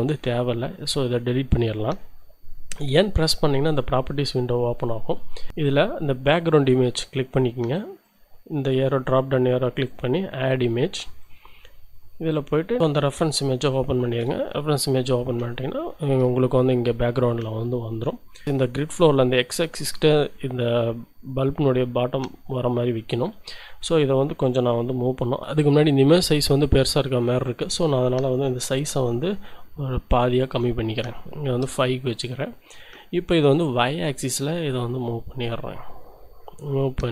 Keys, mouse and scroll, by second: 0.1 Delete, 0.7 click, 2.8 n, 6.3-7.3 drag, 8.0 click, 9.8 click, 11.2 click, 12.3 click, 13.1 click, 14.5-15.4 scroll up 2, 15.5 shift+click, 16.9 middle click, 25.5 middle click, 27.8 click, 29.2 5, 30.5 Return, 33.6-37.1 shift+drag.